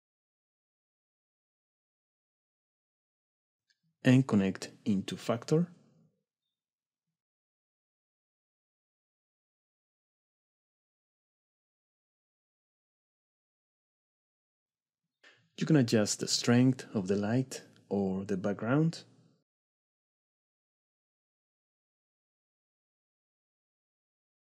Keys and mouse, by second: 0.2 middle click, 2.9 click, 4.5-6.7 drag, 7.6 click, 9.6-9.9 shift+middle drag, 10.1-10.5 middle drag, 10.5 click, 10.7-11.7 middle drag, 11.7 drag, 12.1 click, 12.9 click, 13.7 click, 14.0 click, 15.1 shift+click, 15.9 shift+click, 16.3 shift+middle click, 16.8-18.0 drag, 18.0 middle click, 18.5 click, 18.8-20.9 middle drag, 22.6 middle click.